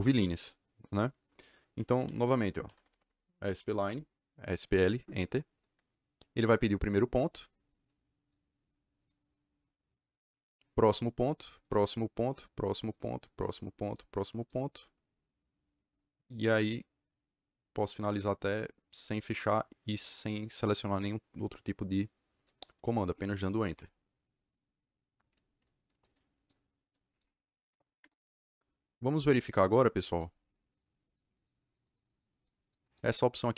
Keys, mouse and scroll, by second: 2.3-3.4 typing, 3.7 Return, 5.9-6.8 scroll up 2, 7.9-8.9 scroll up 2, 8.9 click, 10.4-10.8 scroll down 2, 10.8 click, 12.2 click, 12.8 click, 13.4 click, 13.8 click, 14.3 click, 18.0 click, 22.7 KP_Enter, 26.9-27.3 scroll down 2, 27.3-28.0 scroll up 2, 28.0 KP_Enter, 29.4 click, 30.3-30.7 scroll down 4, 30.6 click, 31.0 click, 31.0-31.4 scroll up 4, 31.3 click, 31.6 click, 31.8 click, 32.0 click, 32.3 click, 32.5 click, 32.8 click.